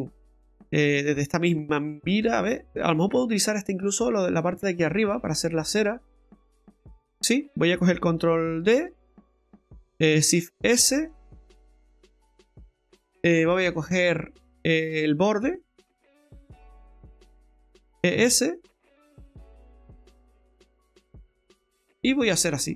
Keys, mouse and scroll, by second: 3.1 Tab, 4.1 right click, 4.5 Tab, 6.2 alt+shift+right click, 8.7 shift+d, 10.3 shift+s, 14.4 click, 15.7 right click, 16.1 alt+shift+right click, 17.0 right click, 18.0 e, 22.3 middle click.